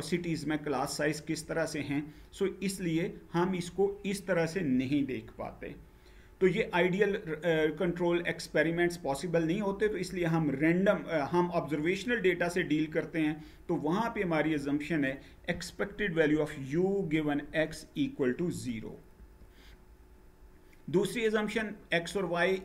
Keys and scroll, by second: 18.9 Page_Down.